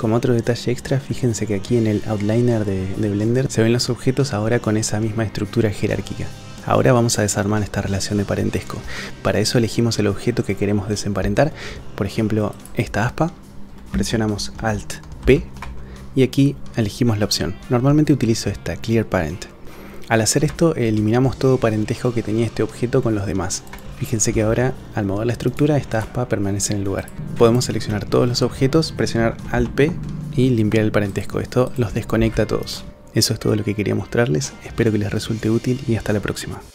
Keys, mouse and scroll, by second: 8.9 shift+middle drag, 12.5 click, 15.2 alt+p, 23.7 click, 24.3 g, 25.9-27.1 drag, 27.2 shift+c, 27.5 shift+click, 29.5 alt+p, 31.7 click, 32.1 g.